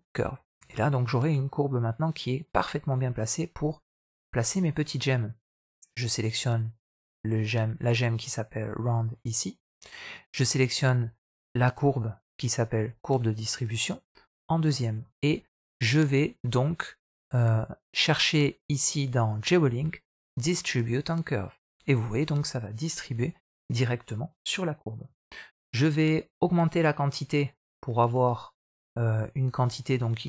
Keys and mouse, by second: 0.4 middle click, 1.4-3.5 middle drag, 4.5 middle drag, 14.3 middle click, 14.9 shift+middle drag, 20.9 click, 27.5-30.2 drag.